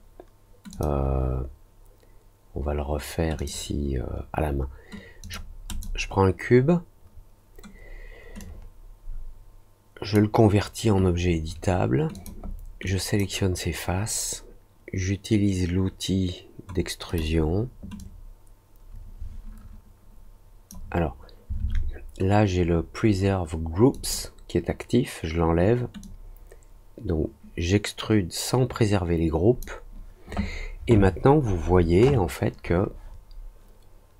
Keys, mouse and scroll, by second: 0.7 click, 3.3 click, 5.2 click, 5.6 click, 8.3-10.1 drag, 12.1 click, 12.8 click, 17.0 click, 17.9-20.6 drag, 23.9 click, 26.0-29.5 drag.